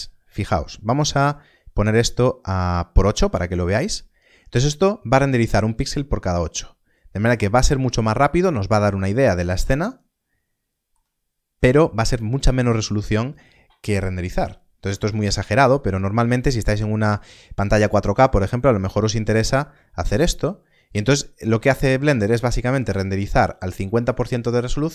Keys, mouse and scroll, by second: 3.4 click, 8.9 middle click, 15.0 click, 20.0 click.